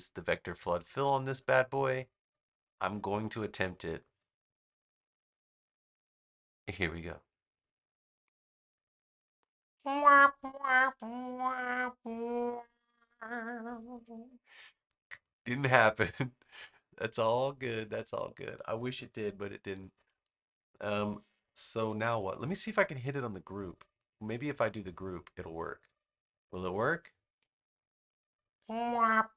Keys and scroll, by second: 21.7 super+=.